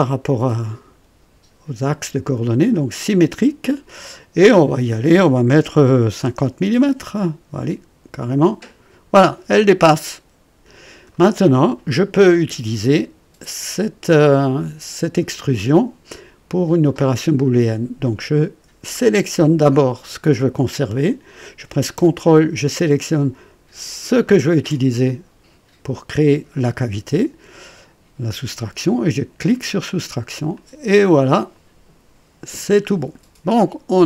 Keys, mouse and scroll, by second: 4.4 click, 6.0 KP_5, 6.4 KP_0, 8.4 click, 9.5-11.2 drag, 19.0 click, 24.2 ctrl+click, 29.4 click, 30.5-32.7 drag, 32.8 scroll down 2, 33.4-34.0 drag.